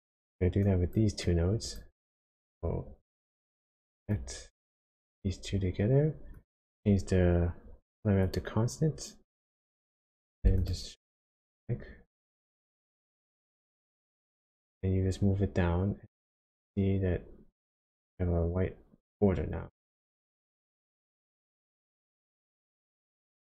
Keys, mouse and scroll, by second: 0.6 click, 1.2 click, 2.0 click, 4.1 click, 6.3 click, 9.7 click, 10.6 ctrl+shift+click, 12.9 click, 20.9 click, 22.8 click.